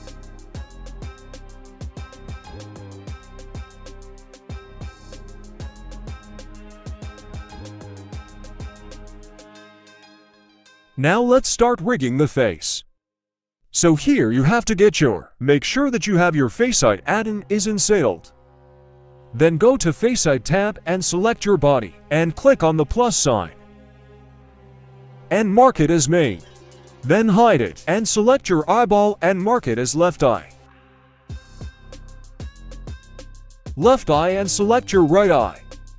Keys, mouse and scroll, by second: 0.1-0.5 middle drag, 1.0 right click, 1.4 middle drag, 1.9 r, 4.9 click, 6.0 scroll down 1, 6.3 shift+middle drag, 6.7-7.1 middle drag, 7.5 h, 8.9-9.3 shift+middle drag, 9.5 scroll up 1, 9.9 right click, 12.4 middle click, 12.9-13.3 shift+middle drag, 15.7 click, 16.7 shift+middle drag, 17.1 middle click, 17.7 scroll up 1, 18.0 shift+middle click, 19.0 click, 20.4 click, 21.0-21.6 shift+middle drag, 23.1 click, 24.4-24.9 scroll down 2, 24.9-25.6 scroll up 4, 25.6 h, 26.7 right click, 27.6 g, 29.6-30.5 drag, 31.9-32.5 scroll down 1, 33.0 click, 34.9 h, 35.5 right click.